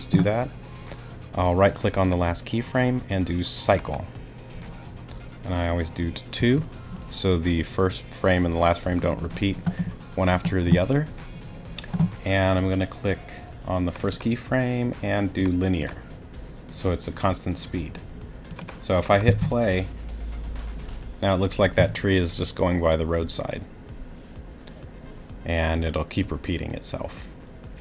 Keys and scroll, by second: 6.4 2, 19.2 space.